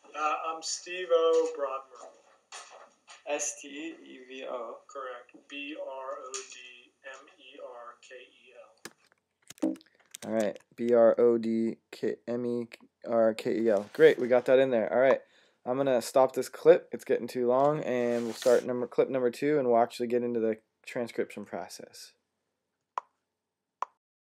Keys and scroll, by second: 9.0-9.9 typing, 10.1 Tab.